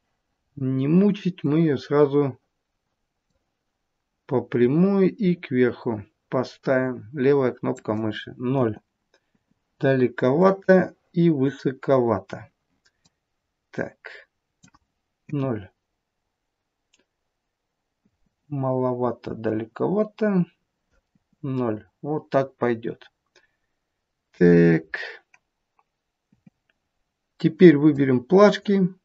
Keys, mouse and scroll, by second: 0.5 scroll down 2, 1.4 click, 4.6 click, 8.5 KP_0, 9.2 KP_0, 10.4 click, 13.1 click, 15.2 KP_0, 18.0 KP_0, 19.4 click, 21.2 KP_0, 26.2 KP_0, 27.9 click.